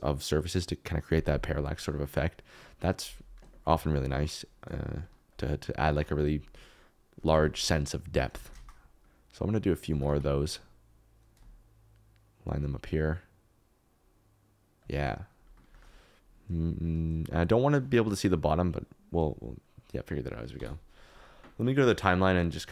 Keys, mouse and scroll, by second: 8.5 alt+d, 8.5 shift+z, 10.0 alt+d, 14.8 shift+click, 15.7 shift+click, 18.6 click.